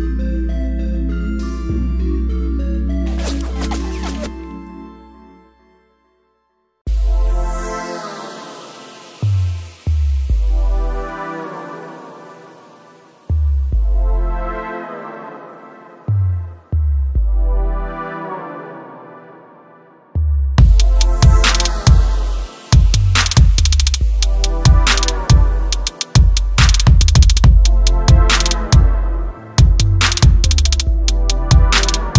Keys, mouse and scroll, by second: 12.2 click, 15.5 click, 19.2 click, 20.6 click, 20.9 space, 27.0 space, 27.2 click, 27.9 click, 28.5 space, 29.6 space, 31.8-32.1 typing, 31.8 click.